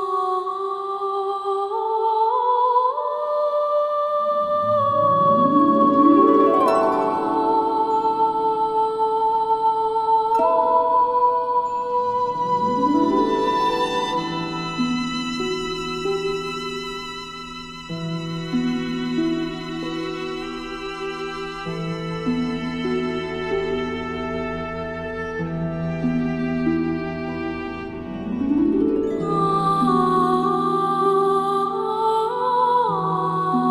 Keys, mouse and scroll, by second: 0.5 space, 0.6 click, 1.8 space, 1.9 click, 2.9 space, 3.0 click, 4.3 space, 4.3 click, 5.3 space, 5.5 click, 7.5 alt+scroll up 1, 7.6-9.4 drag, 16.9 click, 17.7 alt+scroll down 1, 18.0 space, 18.1 click, 18.5 space, 19.1 click, 20.0 space, 20.1-20.7 drag, 21.9 space, 21.9 click, 22.0 click, 23.9 alt+scroll up 1, 24.7 click, 31.5 ctrl+z, 33.4-33.7 drag.